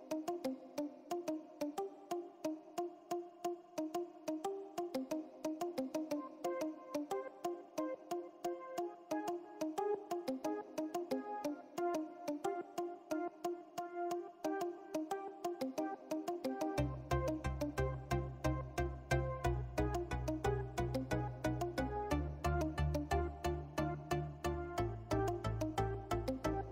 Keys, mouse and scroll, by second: 0.4 click, 2.3-5.0 typing, 5.7 click, 7.2 click, 7.8-8.2 typing, 8.7-26.7 drag.